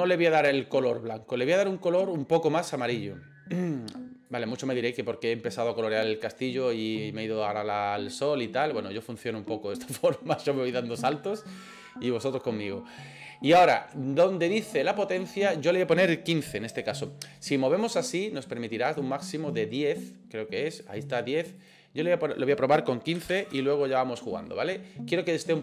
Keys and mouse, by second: 15.2-18.0 drag, 18.4-20.9 drag, 21.6-24.5 drag.